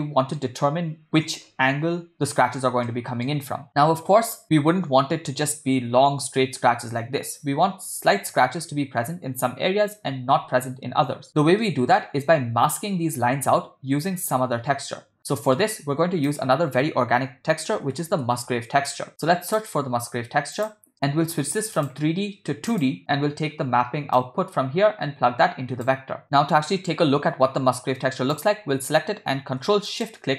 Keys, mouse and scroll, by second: 2.9 middle click, 11.6 middle click, 15.3 middle click, 16.1 shift+a, 21.8-23.0 drag, 24.2 click, 24.6-25.9 drag, 28.3 click, 30.1 ctrl+shift+click.